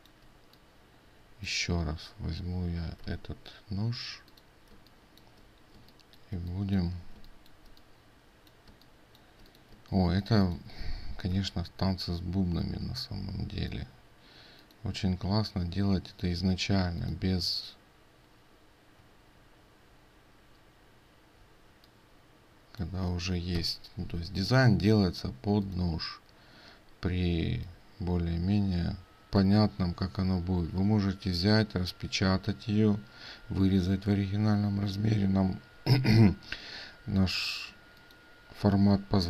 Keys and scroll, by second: 3.1 ctrl+c, 11.4 ctrl+v.